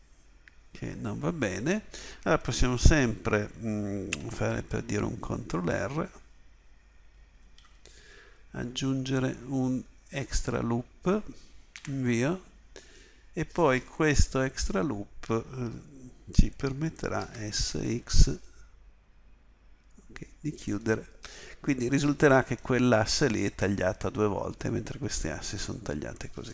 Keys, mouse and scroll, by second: 7.2 ctrl+r, 14.3 KP_7, 17.3 s.